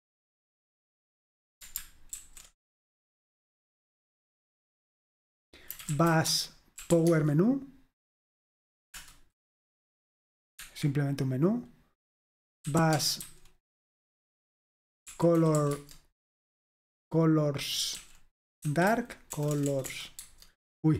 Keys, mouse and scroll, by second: 2.2 alt+super+r, 5.5-7.4 typing, 9.0 Return, 10.7 Escape, 12.5-13.8 typing, 15.0-19.6 typing.